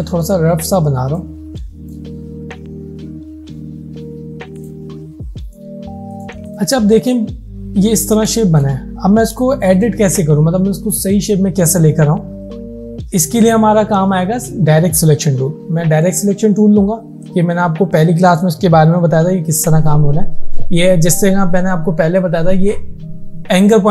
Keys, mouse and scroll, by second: 1.5 space, 1.7 click, 4.6 click, 7.6 alt+scroll up 2, 8.0-8.4 alt+scroll down 2, 8.4 space, 8.5 click, 8.9 alt+scroll up 1, 9.6 space, 9.7 click, 16.1 click.